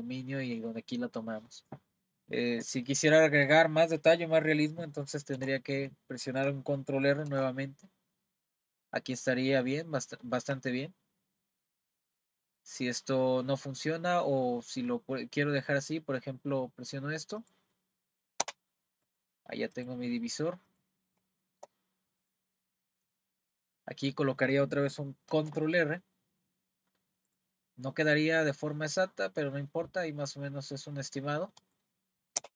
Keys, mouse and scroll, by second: 2.5-2.8 scroll up 1, 5.4 y, 7.3 r, 19.0 click, 19.8 click, 20.2 middle click, 20.7 click, 21.3 shift+middle click, 22.2 click, 22.5 scroll up 1, 23.2-23.8 scroll down 1, 23.8 middle click, 25.3 r, 32.4 Return.